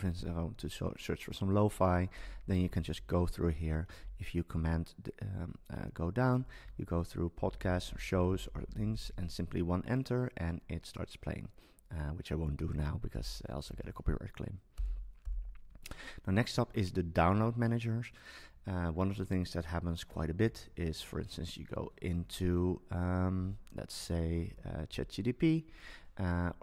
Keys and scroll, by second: 1.9 Down, 4.0 super+Down, 6.6 Down, 8.9 Down.